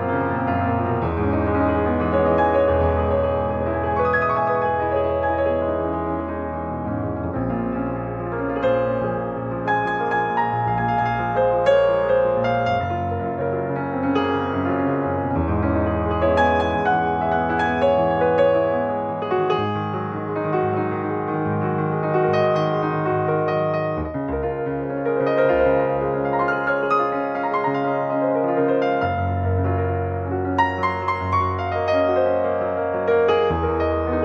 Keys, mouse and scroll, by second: 1.2 click, 5.9 click, 7.1 click, 9.0 click, 11.2-14.8 drag, 15.8 click, 16.2 click, 16.9 click, 19.3 click, 22.2 click, 24.2-27.4 drag, 31.7 click, 33.0 click.